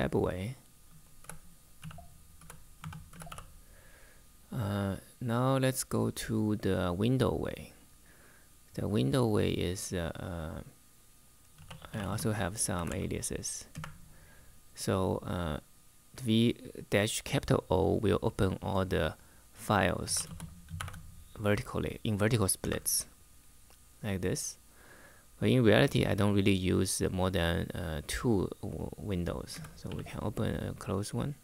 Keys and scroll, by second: 0.9-3.5 typing, 11.0-13.0 typing, 13.5 Return, 19.7-20.5 typing, 22.3 Return, 29.2-29.6 typing, 31.1 typing.